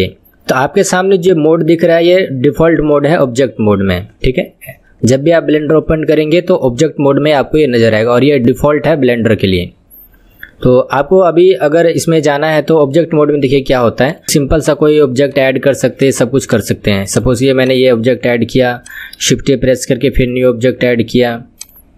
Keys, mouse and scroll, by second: 14.0 click, 14.6-15.4 drag, 16.0 click, 16.4 click, 17.2-17.7 drag, 18.8 click, 19.3 shift+a, 21.6-21.9 drag.